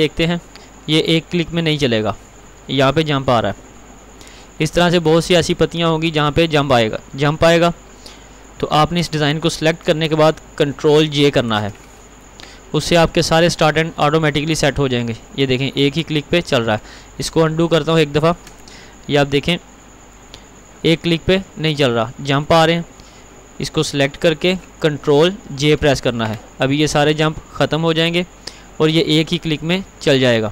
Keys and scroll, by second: 11.3 ctrl+j, 18.7 ctrl+z, 25.5 ctrl+j.